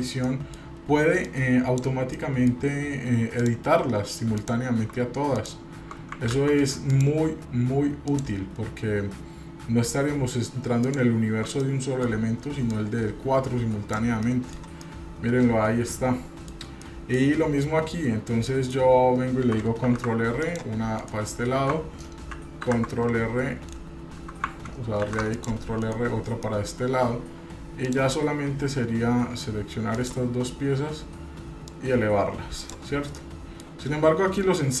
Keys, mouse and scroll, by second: 0.2 middle click, 1.3 click, 2.1 middle click, 2.6-3.2 scroll up 2, 3.4 click, 4.4 click, 5.3 shift+click, 6.3 ctrl+z, 6.9 shift+click, 8.0 shift+click, 10.9 shift+click, 11.6 middle click, 12.7-14.2 drag, 14.2 middle click, 14.6 scroll down 1, 14.8-16.6 middle drag, 16.8 scroll down 1, 16.8 middle click, 18.4 middle click, 19.8 ctrl+r, 22.2 ctrl+r, 25.0 ctrl+r, 26.4 middle click, 26.8 scroll up 2, 27.8 click, 28.7 scroll up 1, 31.7-32.8 drag, 32.9 scroll down 1, 33.2 middle click, 33.8 scroll up 2.